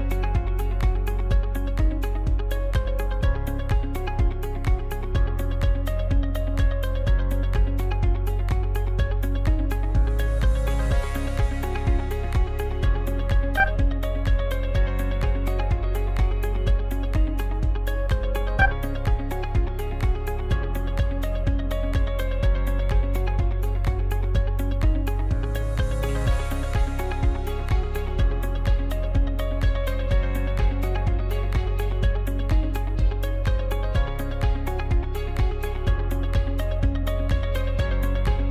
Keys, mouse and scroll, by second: 0.2-1.0 scroll down 1, 1.0 scroll down 1, 1.1 shift+d, 2.2 g, 5.2-6.3 middle drag, 6.3-6.8 scroll up 2, 6.8-8.8 shift+middle drag, 8.8 ctrl+a, 14.5-14.9 scroll down 8, 15.6-17.7 drag, 17.7-18.4 scroll up 1, 18.4 Tab, 18.8 right click, 19.4 shift+right click, 22.3-25.6 drag, 25.6 right click, 26.3 shift+right click, 26.8 shift+right click, 27.2 middle click, 28.1 shift+right click, 28.5 middle click, 29.3-30.0 scroll up 1, 30.0-32.7 middle drag, 32.7 ctrl+e.